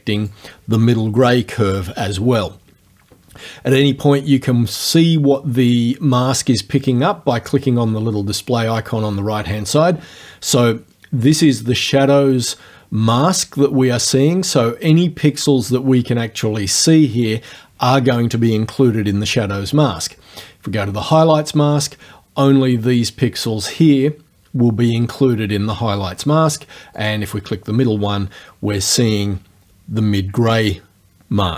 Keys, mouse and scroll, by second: 6.2 click, 21.0 click, 27.0 click.